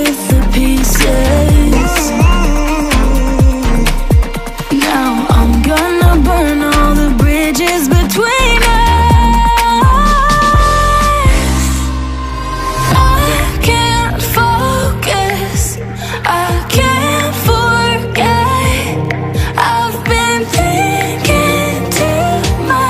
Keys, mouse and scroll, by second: 0.2 click, 4.0 click, 10.6 click, 14.1-17.3 drag, 17.3-22.8 drag.